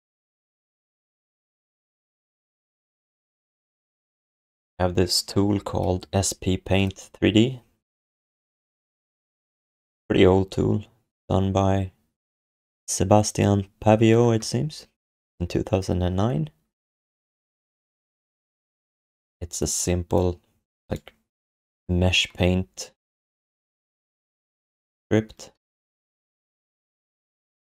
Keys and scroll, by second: 25.5 x, 27.1 x.